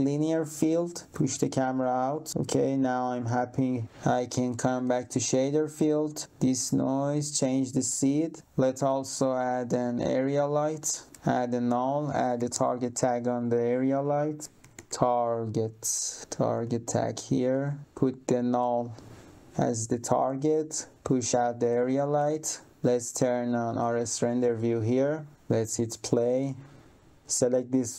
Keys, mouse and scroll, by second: 1.0 click, 1.5 click, 4.4 click, 6.2 click, 7.2 click, 7.7 click, 9.1 click, 11.1 click, 11.6 right click, 12.1-15.3 typing, 16.5 click, 17.5 click, 20.3 click, 22.6 click, 25.6 click, 27.2 click.